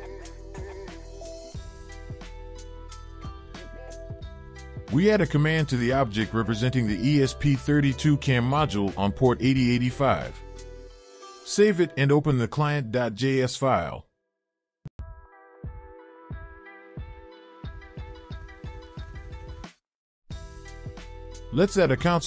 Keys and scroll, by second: 4.8 ctrl+v, 11.7 ctrl+s.